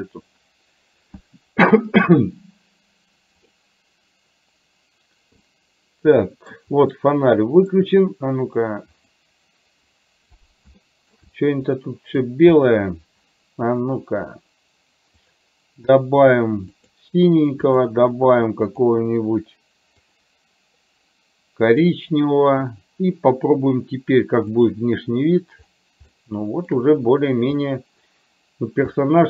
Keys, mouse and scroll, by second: 3.7 click, 5.6-6.6 middle drag, 7.1 middle click, 10.8 shift+middle click, 11.8 middle click, 12.6 click, 14.0 click, 15.3 click, 17.8 click, 18.8 click, 20.2 click, 26.3 shift+middle click, 29.0 middle click.